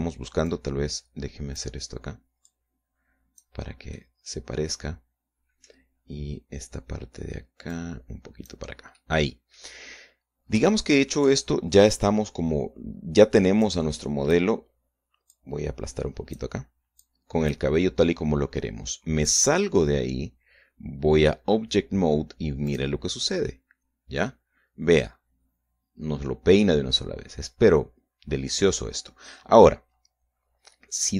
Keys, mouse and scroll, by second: 0.5 scroll up 2, 1.4-2.7 drag, 3.4-4.5 drag, 4.9-6.8 middle drag, 8.6 click, 9.9 middle click, 11.2 scroll down 2, 11.6 shift+middle click, 14.6 click, 16.2-17.5 drag, 18.0 click, 20.2 click, 23.6 click, 24.4-29.8 middle drag.